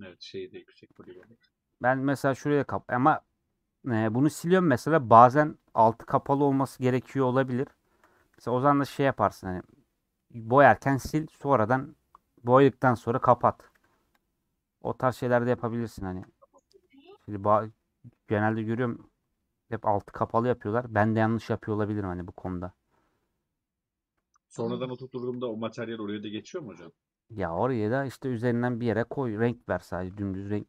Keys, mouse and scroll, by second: 0.7 click, 0.9 shift+middle click, 1.1 scroll down 1, 1.2 middle click, 1.6-2.4 scroll up 5, 2.4-4.4 scroll down 4, 2.7 middle click, 4.4-5.5 scroll down 1, 5.5 c, 5.9-6.4 scroll up 4, 7.0 c, 7.7 shift+middle click, 8.1 c, 9.3-9.8 scroll down 4, 9.9-14.3 middle drag, 14.3 x, 14.7 middle click, 15.3-15.6 scroll up 2, 15.6 middle click, 16.2 scroll up 1, 16.4 middle click, 17.1 ctrl+z, 17.5 middle click, 17.7 scroll down 1, 18.4-19.2 scroll up 1, 19.3-20.5 middle drag, 20.5 x, 20.8-22.7 middle drag, 22.7 scroll down 1, 22.8-25.5 middle drag, 25.5 scroll up 1, 29.4 scroll down 1, 29.6-30.6 middle drag.